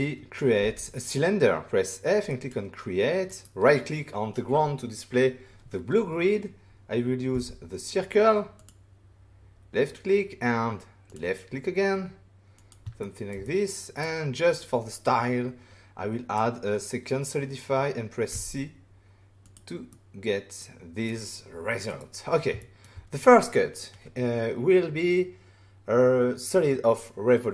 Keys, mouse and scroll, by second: 2.2 click, 2.2 f, 3.2 right click, 7.3 c, 8.5 click, 11.0 click, 12.5 click, 13.0 ctrl+middle click, 13.4 middle click, 14.6 click, 18.3 c, 19.4 click, 19.9 middle click, 21.8 right click, 22.6 shift+middle click, 22.8 middle click, 25.0 shift+scroll up 1.